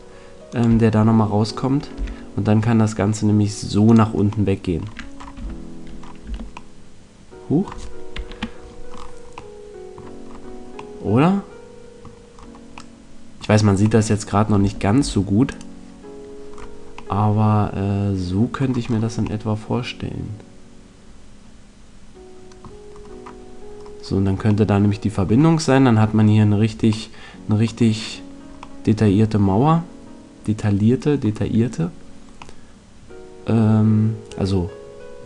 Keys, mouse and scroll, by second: 0.5 click, 2.5 e, 3.9 click, 5.3 z, 6.2 Tab, 8.2 KP_5, 14.5 Tab, 14.9 Tab, 18.5 middle click, 19.5-20.9 middle drag, 27.4-30.5 middle drag, 32.4-34.1 middle drag.